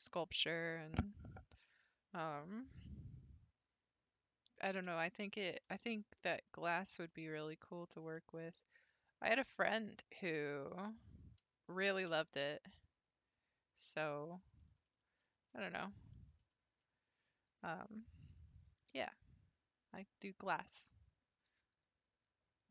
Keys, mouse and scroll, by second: 5.7-7.1 scroll up 3, 7.1-8.4 shift+middle drag, 8.4 ctrl+r, 10.0-11.0 shift+middle drag, 11.0 click, 12.1 g, 14.9-15.9 middle drag, 15.9 scroll down 3, 16.4 shift+middle click, 16.6 scroll up 1, 16.8-21.4 middle drag.